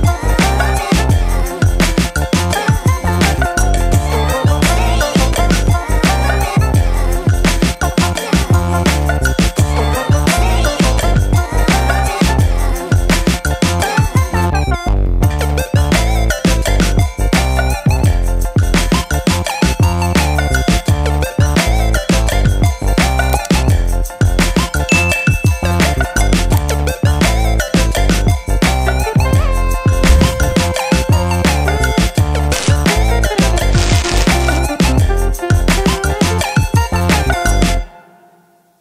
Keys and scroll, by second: 20.2 ctrl+shift+[.